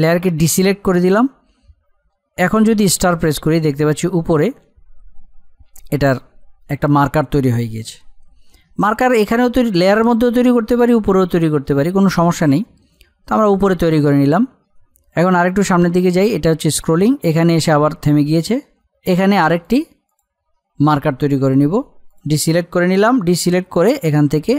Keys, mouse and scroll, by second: 15.1-19.6 drag.